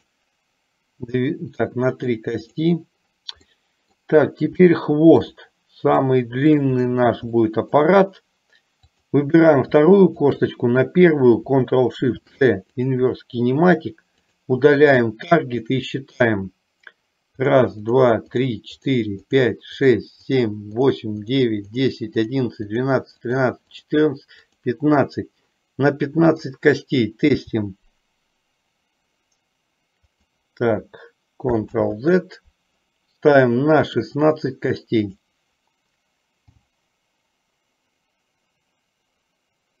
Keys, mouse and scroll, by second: 0.2 click, 2.6 click, 3.8 middle click, 4.8 shift+middle click, 6.3 shift+middle click, 7.6 middle click, 9.0 click, 10.2 shift+click, 12.2 ctrl+shift+c, 15.0 drag, 17.6 click, 18.1 click, 19.0 click, 19.5 click, 20.0 click, 20.5 click, 21.1 click, 21.5 click, 21.8 click, 22.5 click, 23.0 click, 24.0 click, 24.6 click, 27.5 g, 31.8 ctrl+z, 34.0 click, 35.1 click, 36.6 g.